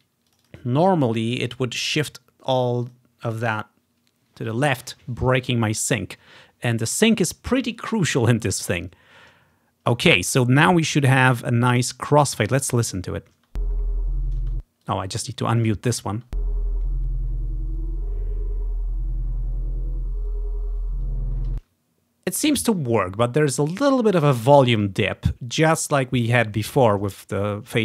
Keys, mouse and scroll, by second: 3.0 click, 12.6 click, 12.9 click, 13.4 space, 13.5-14.6 drag, 14.6 space, 14.9 click, 16.2 space, 16.4 click, 21.5 space.